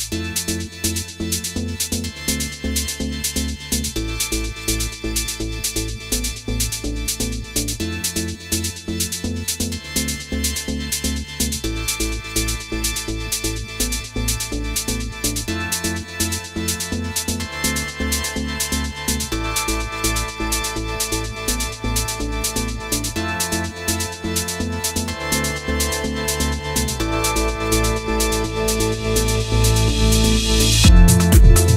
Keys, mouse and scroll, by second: 0.9 KP_1, 2.0 click, 3.4 a, 4.1 g, 7.4 ctrl+a, 9.3 click, 10.2 middle click, 14.0 shift+middle click, 14.4-15.8 scroll up 1, 19.9-20.6 scroll up 2, 20.6 middle click, 25.9 click.